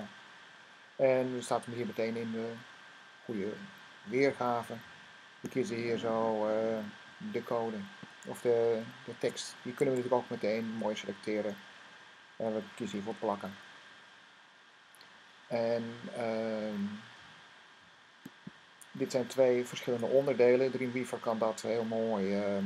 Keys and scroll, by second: 9.0 c, 9.7 Tab, 12.8 v.